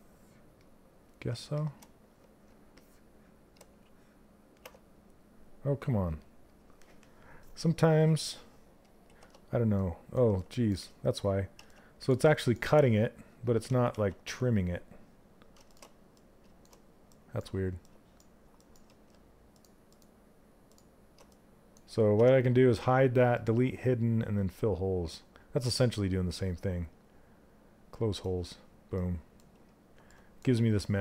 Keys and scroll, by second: 3.3 ctrl+space, 8.6 shift+f, 13.2 ctrl+z.